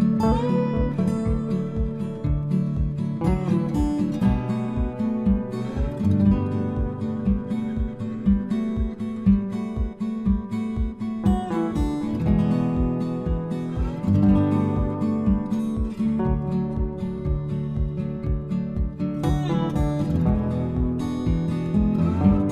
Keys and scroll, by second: 11.8 ctrl+c, 13.1 ctrl+v.